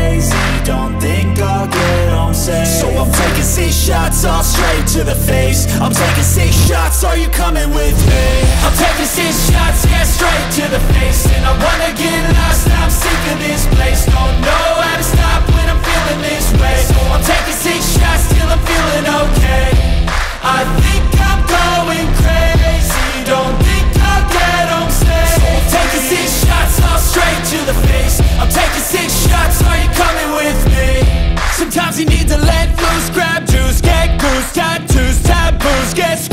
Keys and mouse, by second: 8.9-10.3 drag, 16.8 click, 22.1 click, 24.3 click, 25.8 click, 28.2 click, 29.5 shift+click, 31.9-33.3 drag, 33.8 click, 36.1 r.